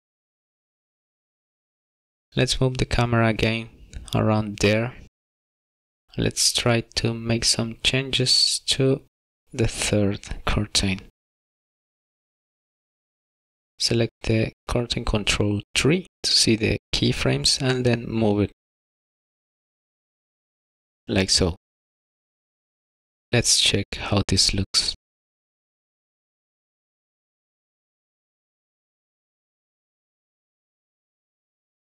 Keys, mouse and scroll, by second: 1.4 click, 1.8 click, 2.7 click, 9.0 middle click, 10.0 shift+middle click, 10.7 middle click, 11.8 click, 12.7 middle click, 13.0-13.9 scroll up 3, 13.2 middle click, 13.9 click, 16.2 middle click, 17.5 click, 22.4 middle click, 22.7 shift+middle click, 23.0-23.4 scroll down 3, 23.4 shift+middle click, 24.0 middle click, 29.1 click, 30.1 click.